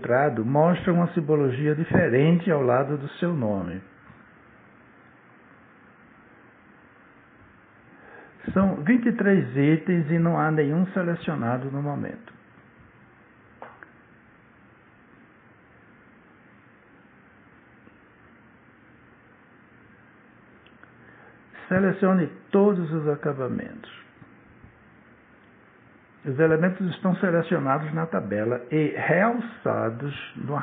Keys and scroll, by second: 5.1 space, 16.4 Return.